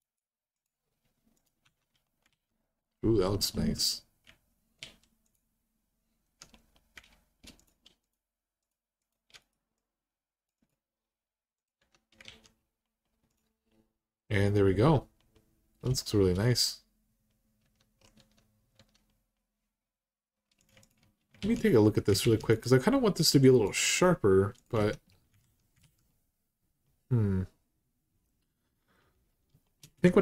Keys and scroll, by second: 1.4 Tab, 2.1 alt+z, 3.5 Tab, 4.6 alt+z, 11.6 Tab, 12.0 alt+z, 17.4 Tab, 17.9 Tab, 18.5 Tab, 21.2 alt+z, 22.0 alt+z, 24.5 Tab, 25.2 alt+z, 29.7 Tab.